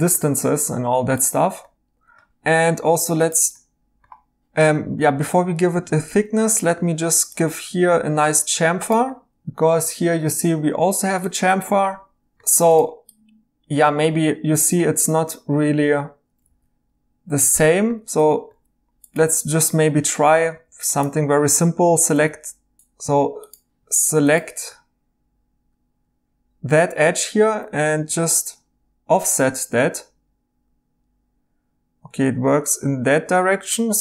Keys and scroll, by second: 2.4 2, 5.0 ctrl+z, 5.2 ctrl+z, 12.3 ctrl+z, 16.5 e, 17.5 e, 18.0 ctrl+z, 19.3-20.5 typing, 22.1 o, 22.8 Escape, 27.9 o.